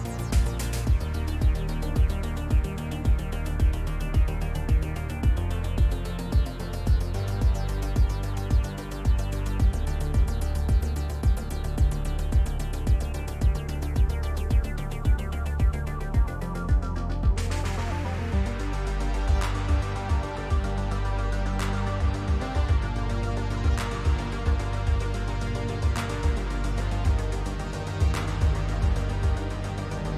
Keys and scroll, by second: 2.6 shift+f, 8.0 s.